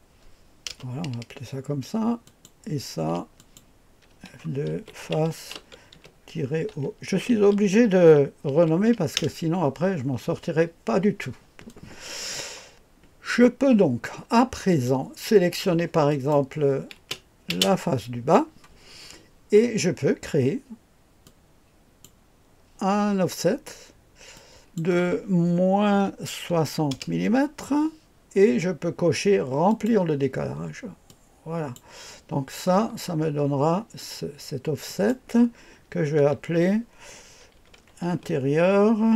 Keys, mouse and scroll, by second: 0.7 Return, 2.2 click, 3.4 click, 4.1 F2, 4.4-9.2 typing, 11.7-12.4 drag, 14.7 click, 15.3-17.7 typing, 16.1 click, 21.2 click, 24.3 click, 25.9 -, 26.5 KP_6, 26.9 KP_0, 29.7 click, 31.1 click, 32.8-34.9 scroll down 1, 34.9 click, 36.2 F2, 37.3-38.6 typing.